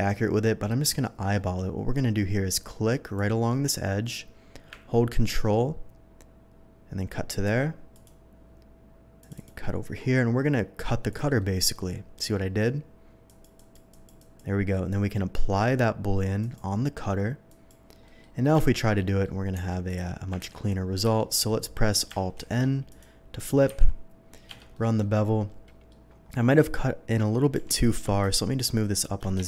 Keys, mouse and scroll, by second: 3.1-7.4 drag, 7.9 ctrl+click, 9.2 ctrl+click, 9.6-9.9 ctrl+middle drag, 10.1 ctrl+scroll down 1, 11.1 click, 11.3-12.3 middle drag, 13.2 click, 13.5 click, 13.9 click, 14.2 click, 16.4 click, 17.4 click, 18.0 middle click, 18.6 shift+middle drag, 18.9 shift+middle click, 19.5 Tab, 19.8 click, 20.4 ctrl+b, 21.0 Escape, 21.3 middle click, 22.3 alt+n, 22.9 click, 23.7 ctrl+b, 24.4 Escape, 24.7 middle click, 25.6 middle click, 27.9 g, 27.9 z, 29.3 Escape.